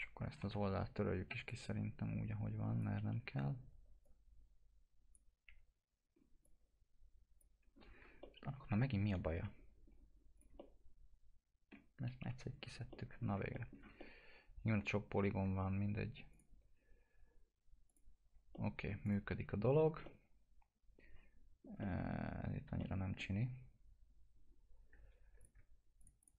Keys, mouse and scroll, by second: 0.3 t, 1.4 click, 3.3 Delete, 4.0 click, 5.4 Delete, 6.1 scroll up 1, 6.4 click, 7.5 Delete, 7.7-8.1 scroll down 1, 8.5 alt+middle click, 9.3 scroll up 1, 10.3 click, 10.6-12.2 alt+middle drag, 12.2 Delete, 12.4-12.8 scroll down 1, 12.9 alt+middle click, 13.2-13.9 scroll down 2, 13.5 middle click, 14.0 alt+middle click, 16.3 click, 18.5 alt+middle click, 19.0 click, 19.3 F4, 20.0-25.4 alt+middle drag, 22.3-22.8 scroll up 1, 25.4 click, 26.0 ctrl+click.